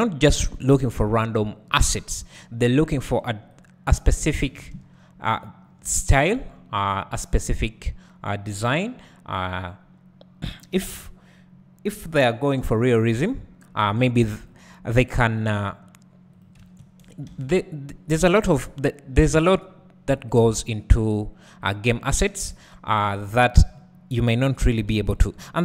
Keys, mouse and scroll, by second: 4.3-24.9 drag, 4.5 alt+a, 4.8 `, 7.0-7.8 scroll up 2, 7.8 scroll up 1, 7.9-13.1 scroll down 2, 13.1-13.9 scroll down 1, 13.9 k, 17.3 alt+a, 18.3 k, 23.7-24.9 scroll up 2, 25.2 shift+click.